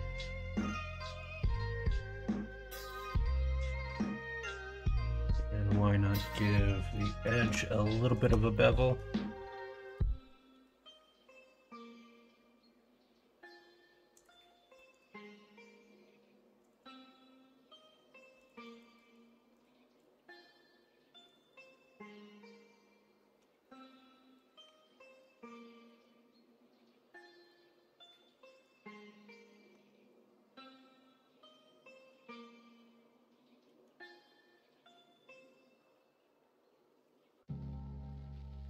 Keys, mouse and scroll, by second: 2.7 shift+middle click, 6.9 middle click, 8.5 middle click, 14.7 middle click, 23.6 middle click, 24.6 q, 25.6 shift+middle click, 27.6-29.2 drag, 29.2 middle click, 29.7 Tab, 30.2-32.1 middle drag, 32.8-33.6 middle drag, 34.0 shift+middle drag, 34.6-37.0 middle drag.